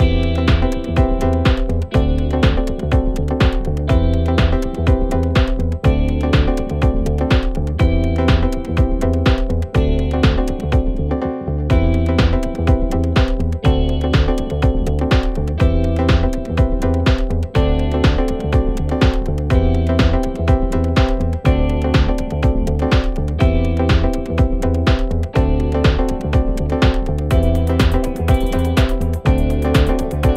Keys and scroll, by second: 7.4 3.